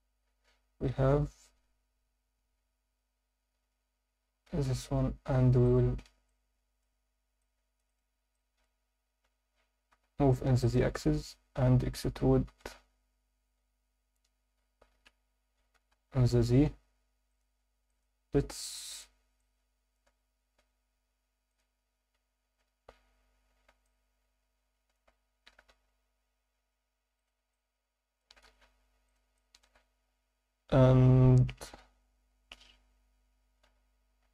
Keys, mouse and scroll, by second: 2.0 scroll up 1, 2.6 Tab, 2.6 scroll up 1, 3.1 a, 4.2 g, 4.5 x, 5.7 click, 5.9 Tab, 6.3 alt+middle click, 7.0 scroll up 1, 7.4-7.8 alt+middle drag, 7.9 click, 8.3 alt+middle drag, 9.2 g, 9.9 z, 10.6 click, 10.8 Tab, 11.1 a, 12.4 e, 12.9 z, 17.3 click, 17.9 alt+middle click, 18.9 click, 19.4 alt+middle click, 20.6 alt+h, 21.5 click, 22.1 Tab, 22.4 Tab, 23.5 a, 23.8-24.9 alt+middle drag, 25.7 z, 27.2 click, 27.5 alt+middle click, 28.4 s, 28.6 z, 29.1 click, 29.4 alt+middle click, 30.0-31.4 scroll up 1, 31.8 KP_3, 32.3 KP_1, 33.0-33.7 scroll down 4, 33.6 z, 34.2 scroll up 2.